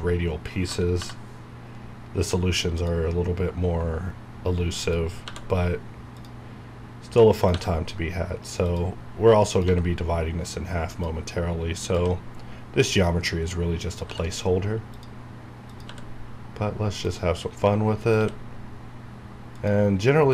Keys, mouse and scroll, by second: 0.9 k, 2.7 click, 2.8 click, 5.3 e, 6.1 click, 7.5 e, 8.6 click, 9.7 e, 10.9 click, 11.9 e, 12.9 click, 14.0 e, 14.9 click, 15.8 e, 16.9 click, 18.2 e, 19.5 click.